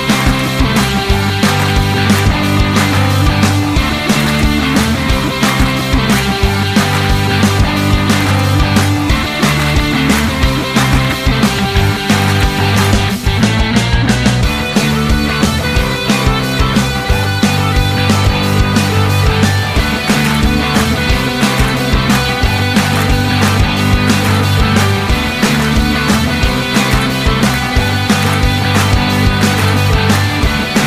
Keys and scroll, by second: 7.5 ctrl+d, 10.4 ctrl+d, 11.2 ctrl+d, 12.6 ctrl+d, 14.2 ctrl+d, 29.0 t, 30.4 u.